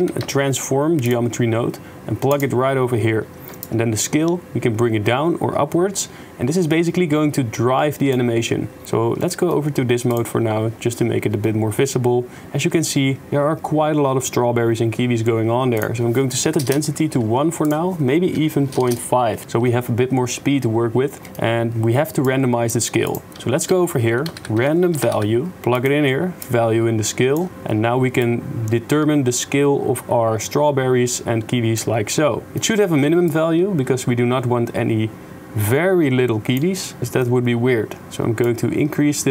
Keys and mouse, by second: 2.5 middle click, 3.7 shift+click, 4.3-8.0 shift+drag, 8.0 shift+middle click, 9.2 middle click, 15.7-16.8 drag, 17.6-18.9 drag, 21.2 click, 22.5 click, 23.7 shift+a, 26.6-27.4 drag, 28.3-31.0 shift+drag, 31.0 shift+middle click, 32.5 middle click, 33.2-34.5 shift+middle drag, 34.5-36.6 shift+drag, 37.2 shift+click, 38.6 shift+click, 38.8-39.3 shift+middle drag.